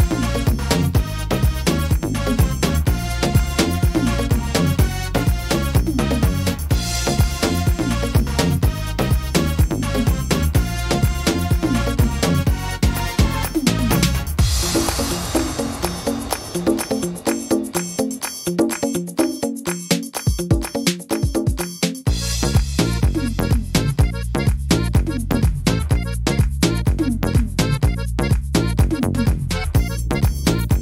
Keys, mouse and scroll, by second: 1.3 click, 9.9 click, 10.8 click, 12.3 click, 17.1 click, 18.0 middle click, 20.5 middle click, 20.6-21.5 scroll up 6, 21.3 middle click, 23.4 s, 29.3 middle click, 29.7-30.5 scroll down 6, 30.3 middle click.